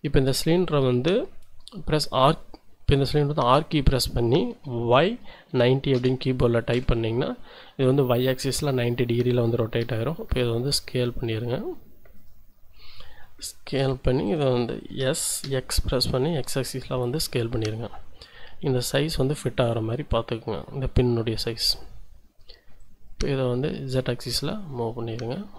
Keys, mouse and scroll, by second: 3.4 r, 5.0 y, 5.5 9, 6.0 KP_0, 6.7 Return, 9.8 s, 12.2 click, 12.5-13.6 scroll up 2, 13.8 s, 14.2 click, 14.9 s, 15.4 x, 21.7 click, 22.9-25.5 drag.